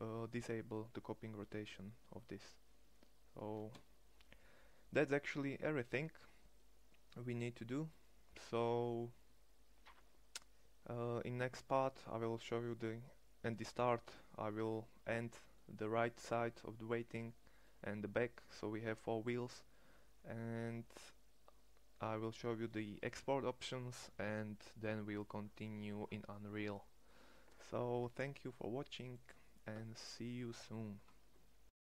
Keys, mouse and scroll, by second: 4.5-10.5 drag, 19.6-21.8 drag, 27.7-28.2 middle drag.